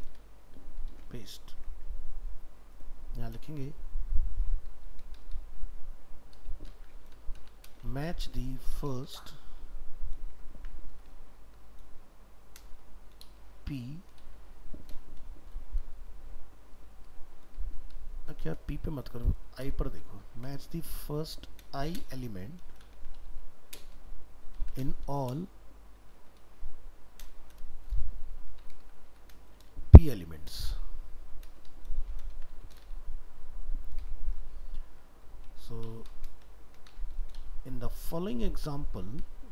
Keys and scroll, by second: 1.2 ctrl+v, 12.7 ctrl+v, 27.4 ctrl+v.